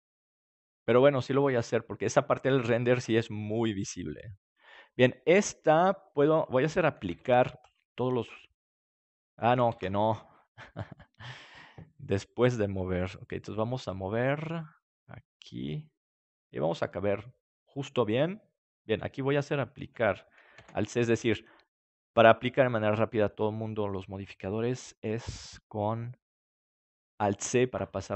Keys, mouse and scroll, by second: 5.6-7.7 drag, 7.0 alt+c, 11.9 ctrl+z, 13.5 g, 17.7-20.5 drag, 20.5 alt+c, 22.9 middle click, 23.2-24.5 middle drag, 24.5 right click, 25.0 g, 27.4-28.1 drag.